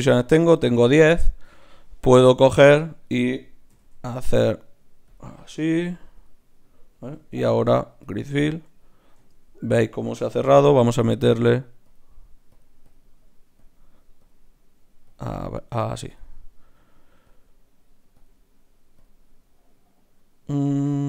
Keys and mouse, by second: 3.7 e, 5.7 g, 7.3 shift+q, 9.1 z, 10.5 F6.